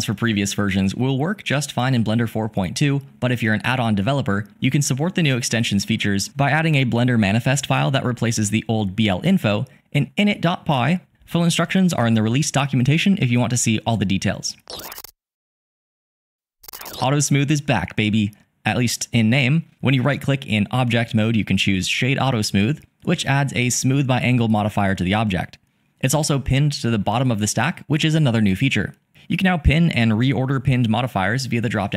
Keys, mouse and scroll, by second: 19.5-22.0 drag, 22.7 click, 23.6-26.8 drag, 27.4-28.6 drag.